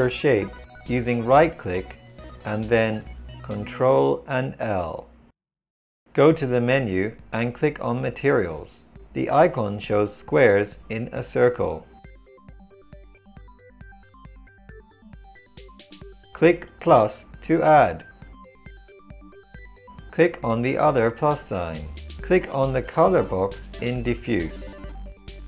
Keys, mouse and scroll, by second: 0.2-2.1 right drag, 2.1 ctrl+l, 7.1 click, 13.5-20.1 drag, 21.3-25.4 drag.